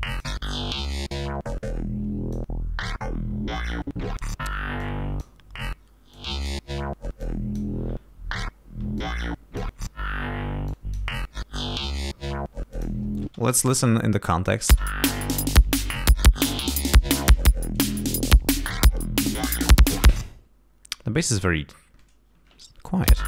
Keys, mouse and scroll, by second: 0.0 click, 0.8-2.5 drag, 4.8 click, 6.1 click, 7.2 click, 8.9 click, 10.6 click, 12.7 click, 13.4 space, 14.7 space, 16.7-17.4 scroll down 4, 17.6 scroll up 2, 18.3-18.7 scroll up 2, 19.4-20.4 scroll down 6, 21.1-21.5 scroll up 2, 21.9 scroll up 2, 23.0 l.